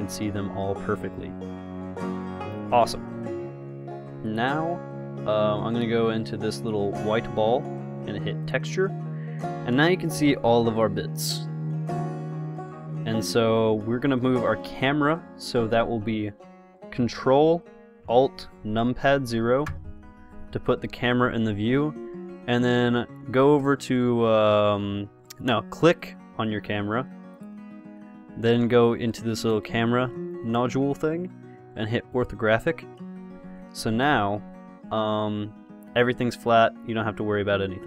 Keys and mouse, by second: 7.7-9.5 drag, 11.8 middle click, 19.9 ctrl+alt+KP_0, 26.3 click, 26.6-30.5 middle drag, 30.5-32.4 drag, 33.9 KP_0.